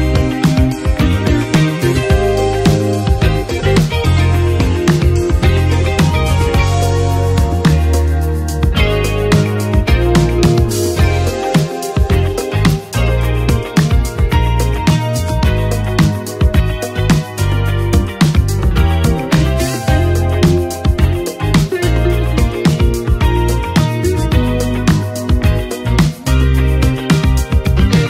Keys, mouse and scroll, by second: 8.4 ctrl+s, 9.4-18.1 drag, 19.3-22.4 drag, 22.4 n, 23.1 click, 24.0 space, 25.2-28.0 drag.